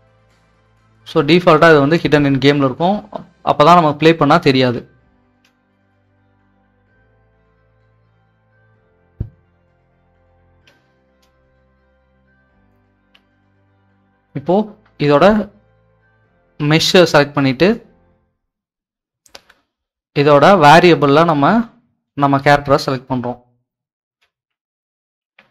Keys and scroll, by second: 5.3 Escape, 10.6 Escape, 24.0 w, 24.6 s, 25.2 w.